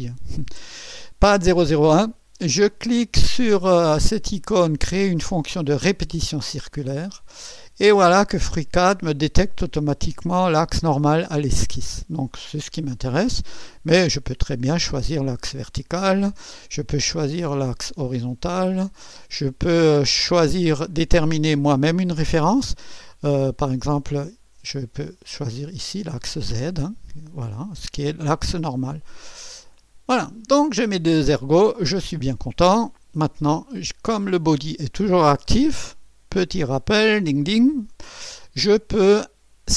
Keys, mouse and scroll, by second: 6.5 click, 8.2 click, 12.2 click, 14.1 click, 14.8 click, 16.9 click, 17.6 click, 18.3 click, 20.9 click, 23.7 click, 25.2 click, 26.4 click, 27.4 click, 29.7 click, 31.1 scroll down 1, 31.4 scroll up 1, 32.1 click.